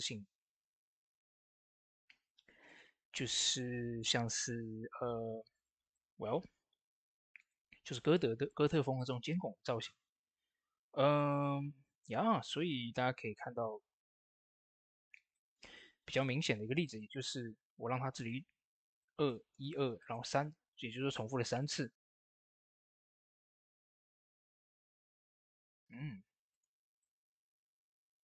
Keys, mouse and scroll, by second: 0.5 typing, 2.5 click, 5.7 click, 5.7 typing, 12.6 click, 12.6 typing, 12.6 click, 13.2 middle click, 13.5 scroll down 1, 14.3 scroll down 1, 14.8 middle click, 16.1 shift+middle click, 17.1 shift+scroll up 1, 17.5 click, 18.1 shift+middle click, 18.8 click, 19.1 shift+middle click, 19.9 click, 20.9 scroll down 1, 21.6 scroll down 1, 22.1 middle click, 25.6 middle click, 26.4 click.